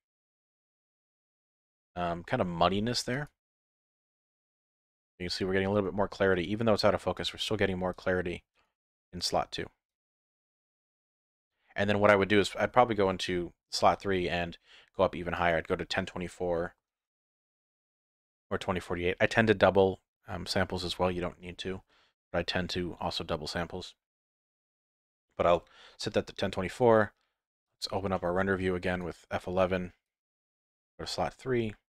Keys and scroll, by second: 26.7 F11.